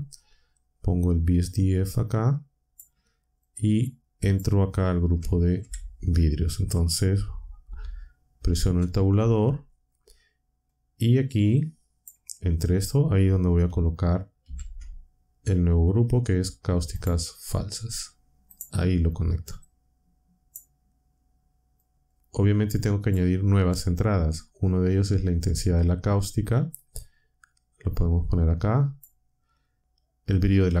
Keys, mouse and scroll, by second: 1.4-2.9 drag, 3.4-4.5 drag, 5.5 ctrl+Up, 8.5 Tab, 10.6-12.2 drag, 14.4 shift+a, 16.9 click, 18.4 click, 19.6-20.7 drag, 21.7-23.2 drag, 24.3 click, 24.9-25.7 drag, 26.9-29.1 drag, 30.7-30.8 drag.